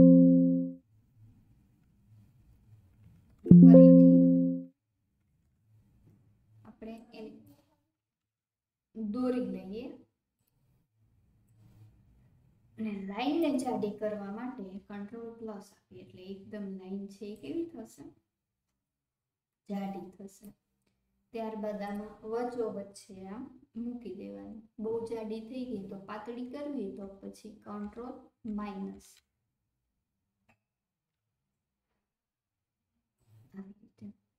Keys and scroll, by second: 3.4 ctrl+z, 5.4 ctrl+z, 8.2 ctrl+z, 14.3 ctrl+z, 14.8 ctrl+KP_Add, 26.4 ctrl+KP_Add, 27.0 ctrl+KP_Subtract.